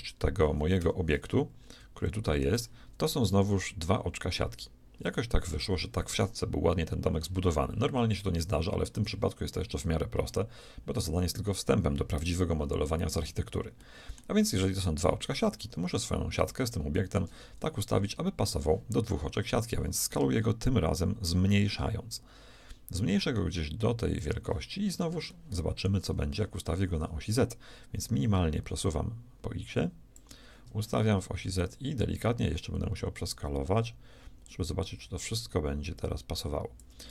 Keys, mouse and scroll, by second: 1.3-6.2 middle drag, 12.8-13.8 middle drag, 17.9-19.9 shift+drag, 17.9 shift+right click, 18.8 middle click, 20.0-22.0 drag, 24.7-27.5 middle drag, 28.0-30.0 drag, 31.6-33.5 drag.